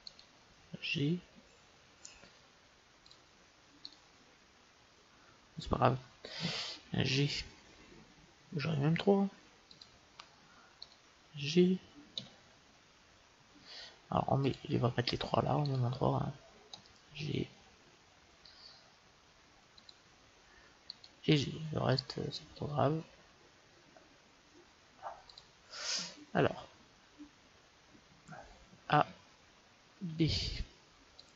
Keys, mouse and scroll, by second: 1.2 g, 3.7-5.5 right drag, 7.0 g, 10.7-12.5 right drag, 12.0 g, 15.9-17.4 right drag, 16.6 g, 20.8-22.8 right drag, 21.2 g, 28.8 a, 29.9 b.